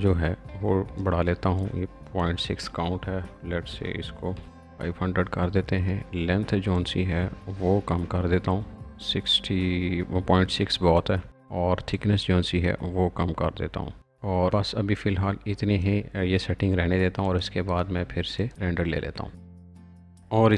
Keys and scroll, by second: 3.6 5, 4.3 0, 4.4 0.